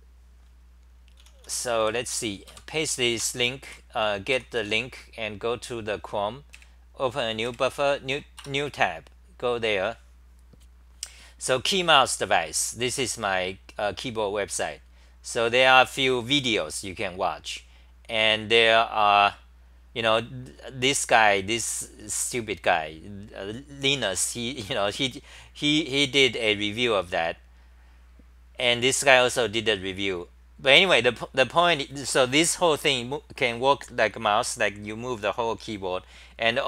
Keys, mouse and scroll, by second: 0.9-2.5 typing, 4.1-5.0 typing.